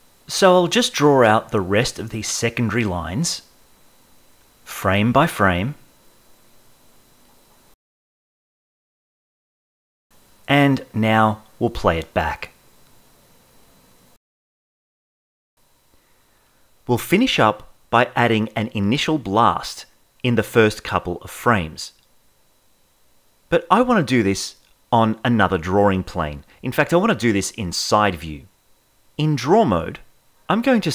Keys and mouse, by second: 0.0 click, 0.4 Right, 0.5 click, 0.9 click, 1.3 click, 1.6 Right, 2.0 click, 2.4 click, 2.6 click, 3.2 Right, 3.6 click, 4.2 click, 4.5 click, 4.8 ], 4.9 click, 4.9 ], 5.6 Right, 5.6 click, 5.9 click, 6.3 click, 6.7 click, 7.2 Right, 7.5 click, 7.9 click, 8.1 click, 8.4 Right, 8.6 click, 9.2 click, 9.5 click, 9.9 ctrl+z, 10.8 space, 29.0 ctrl+Tab.